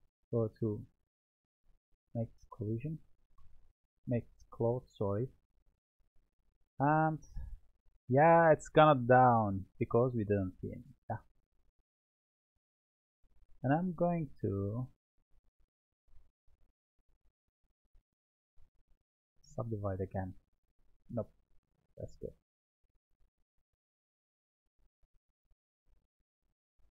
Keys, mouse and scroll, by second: 0.2 click, 1.6-3.2 drag, 3.2 Tab, 6.6-10.5 drag, 10.7-12.6 drag, 12.6-13.7 middle drag, 13.7 Tab, 14.2-15.5 middle drag, 15.5-16.4 scroll up 2, 16.4-19.1 shift+middle drag, 19.1-20.1 right drag, 21.5 ctrl+z, 22.4 click.